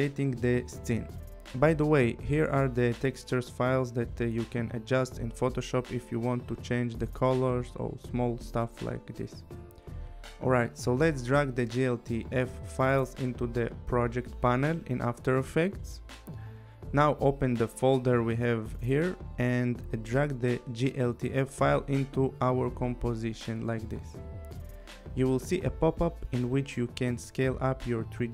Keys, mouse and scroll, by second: 2.5 click, 3.8 click, 7.8 click, 10.3 click, 14.7 click, 22.0 click, 26.7 click.